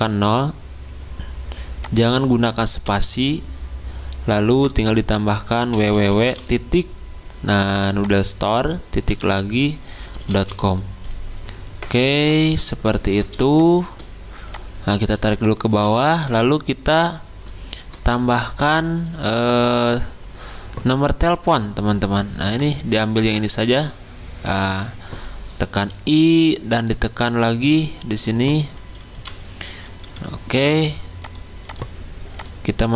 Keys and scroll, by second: 2.9 BackSpace, 5.5-6.8 typing, 8.8-10.9 typing, 13.0-13.7 typing, 25.8 i, 29.1-30.5 typing.